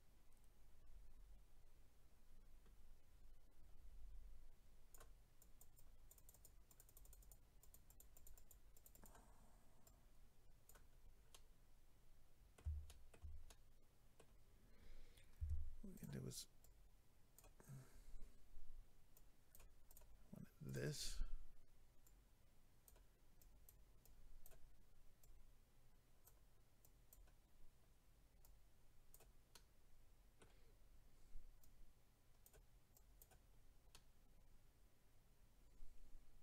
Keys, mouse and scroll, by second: 5.4 click, 5.8 click, 6.3 click, 6.4 double click, 6.7 click, 6.8 click, 7.0 double click, 7.3 double click, 7.6 double click, 7.7 double click, 7.9 double click, 8.0 double click, 8.1 double click, 8.2 double click, 8.3 double click, 8.5 double click, 8.7 double click, 8.8 double click, 8.9 double click, 9.0 double click, 9.8 double click, 10.9 scroll down 2, 11.3 middle click, 12.9 shift+middle click, 13.5 middle click, 15.4 f, 15.9 click, 16.0 click, 16.6 click, 19.1 click, 19.8 click, 19.9 click, 20.6 click, 20.7 click, 22.0 click, 23.4 click, 24.0 click, 25.2 click, 26.8 click, 28.4 click, 29.5 middle click, 30.7-31.6 scroll up 2, 31.6 click, 32.9 click, 33.6-33.9 scroll down 1, 33.9 middle click.